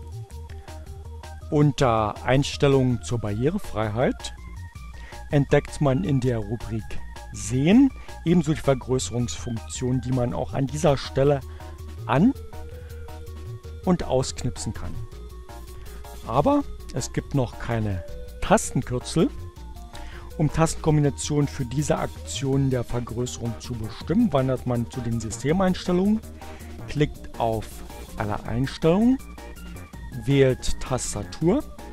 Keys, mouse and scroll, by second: 0.0-1.1 drag, 1.8 click, 3.5-5.4 drag, 11.7 click, 13.7-14.8 drag, 27.6-29.3 drag, 30.2-31.9 drag.